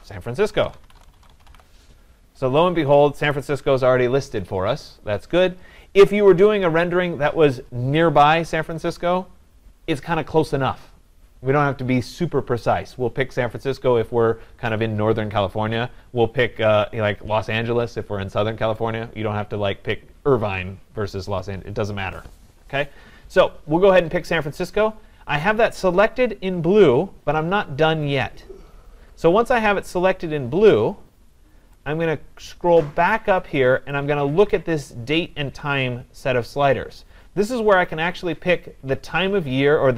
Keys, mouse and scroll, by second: 0.3-2.7 typing, 3.3 click, 6.1-8.4 drag, 34.0-39.0 drag.